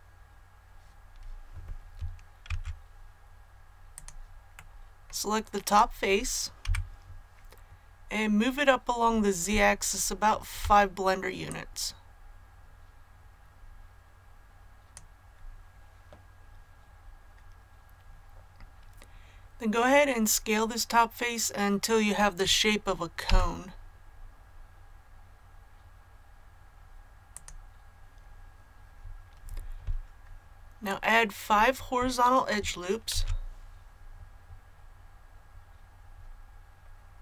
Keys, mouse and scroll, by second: 2.4 Tab, 3.9 click, 4.5 middle click, 5.6 right click, 6.6 KP_1, 9.6 shift+middle click, 11.4-15.2 drag, 23.2 s, 27.3 click, 33.1 ctrl+r, 34.2-36.0 scroll up 1, 36.0-37.2 scroll down 1.